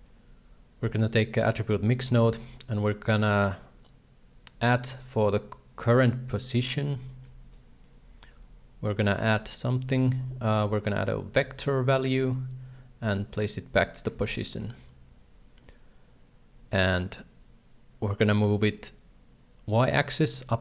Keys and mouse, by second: 3.0-4.6 drag, 7.2 shift+middle click, 13.0 ctrl+c, 14.1 ctrl+v, 15.0 shift+click, 17.0-20.6 shift+drag.